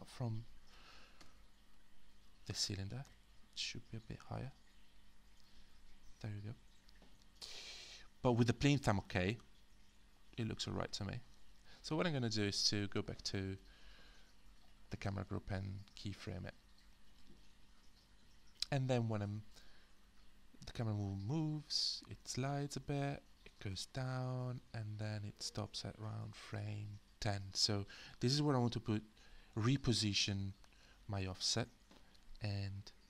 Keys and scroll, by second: 1.2 q, 3.1 w, 31.3 w.